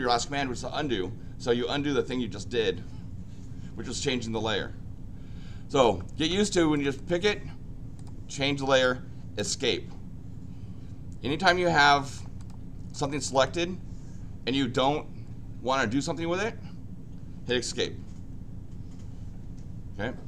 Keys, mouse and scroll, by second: 6.7 click, 6.9 click, 7.9 click, 8.7 click, 11.4 click, 12.3 click, 12.9 click, 13.1 click, 13.3 click.